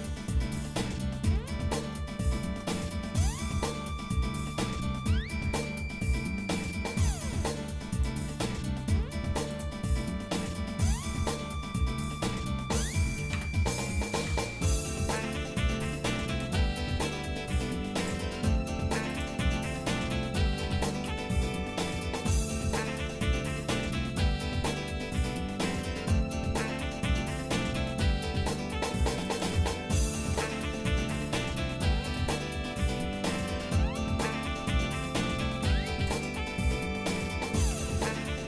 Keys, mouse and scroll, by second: 0.8 shift+middle click, 2.2 shift+middle click, 2.8 middle click, 3.4 shift+middle click, 4.2-4.7 scroll up 2, 5.2 shift+middle click, 6.8-7.5 scroll up 3, 8.8 click, 9.9 click, 13.4 Tab, 14.2 ctrl+Tab, 15.1 click, 18.2 click, 19.2 click, 20.6 g, 30.5 g, 33.0 shift+middle click, 35.6 e, 37.6 s.